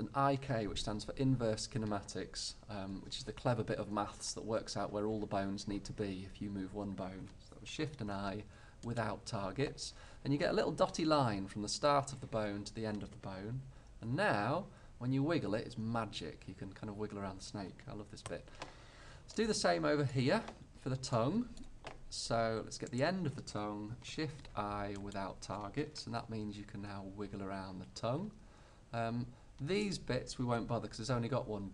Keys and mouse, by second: 7.9 shift+i, 14.2 g, 19.5-23.0 middle drag, 23.0-24.2 right drag, 24.2 middle click, 24.2 shift+i, 24.5 click, 26.1 g, 31.5 right click, 31.5 g.